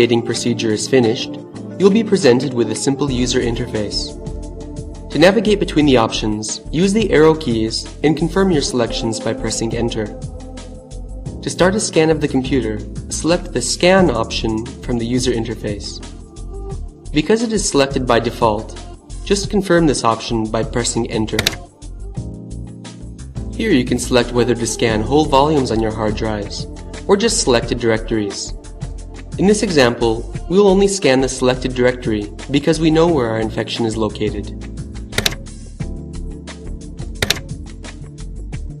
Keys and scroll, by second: 20.4 Return, 33.3 Down, 36.3 Return.